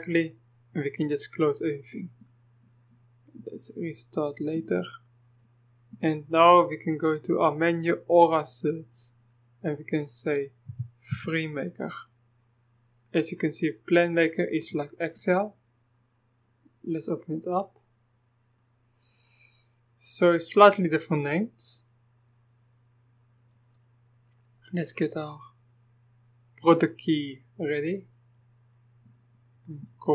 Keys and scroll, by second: 10.7-11.1 typing.